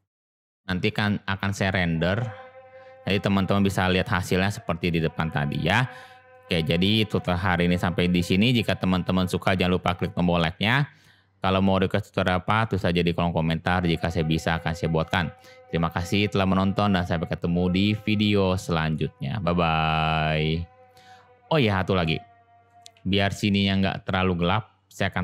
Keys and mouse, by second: 0.0 click, 17.8-19.0 middle drag, 22.0-22.6 shift+middle drag, 22.9 shift+a.